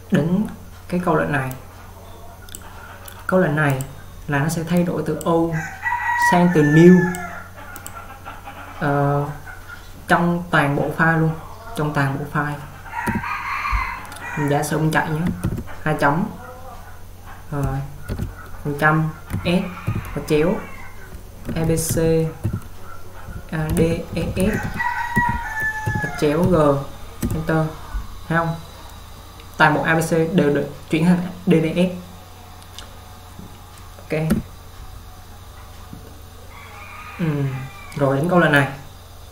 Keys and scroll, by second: 13.3 u, 15.3-16.0 typing, 18.2 typing, 19.4-19.9 typing, 21.3-26.5 typing, 27.3 Return, 34.4 u.